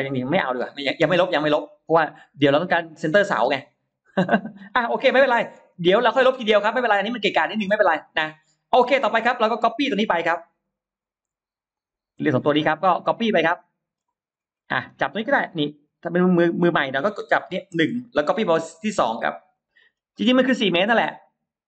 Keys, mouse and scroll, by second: 0.1 click, 1.9 middle click, 1.9-2.3 scroll up 1, 2.8 middle click, 2.8 scroll up 1, 4.4-4.8 scroll down 1, 5.0 middle click, 5.0 scroll up 1, 5.6 scroll down 2, 5.8-6.4 scroll up 2, 6.2 middle click, 7.4 scroll down 1, 8.2-9.2 middle drag, 9.6-10.2 scroll up 2, 10.4 click, 10.8-11.2 scroll up 1, 11.6 shift+click, 12.0 scroll down 1, 12.5 middle click, 12.8-13.1 scroll down 1, 13.2 middle click, 14.2-14.8 scroll up 2, 17.0 click, 19.4 click, 19.8-20.4 scroll down 2, 20.7 middle click.